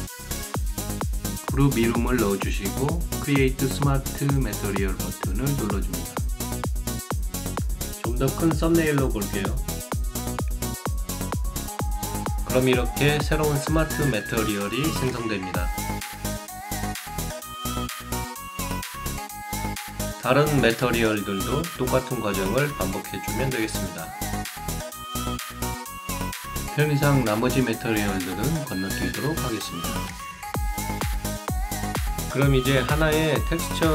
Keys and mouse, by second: 0.1 click, 2.7 o, 2.9 l, 3.5 Return, 3.5 a, 4.5 right click, 6.2 click, 9.0 click, 10.5 click, 13.3 click, 21.0 click, 22.5 click, 23.4 click, 24.2 click, 24.7 shift+click, 24.9 shift+right click, 26.0 click, 26.7 e, 27.0 shift+l, 27.4 Return, 27.4 r.